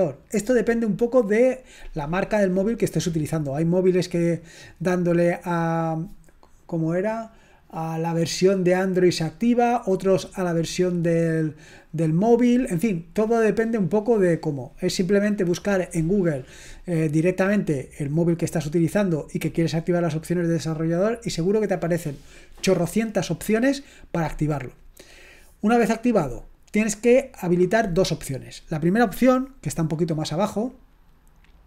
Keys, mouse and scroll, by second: 30.0 scroll down 1.